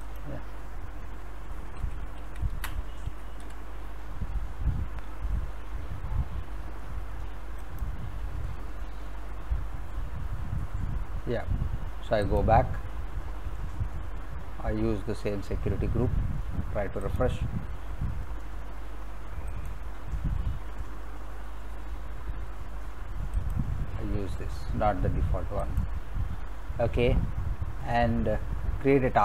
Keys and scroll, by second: 1.4-3.4 typing.